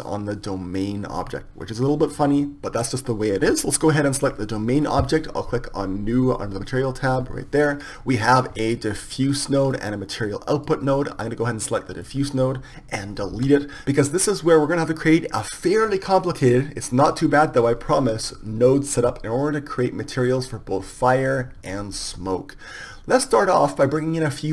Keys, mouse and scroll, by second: 0.9-2.5 right drag, 7.4-12.0 drag, 12.4-13.7 right drag.